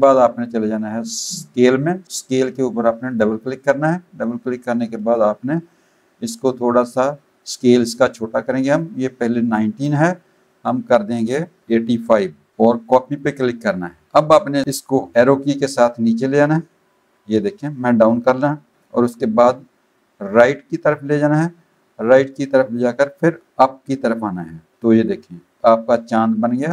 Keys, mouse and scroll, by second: 3.1 click, 9.4 click, 13.0 click, 15.1 Down, 15.7 Down, 17.0 Down, 19.5 Right, 20.4 Right, 23.5 Up, 23.9 Up.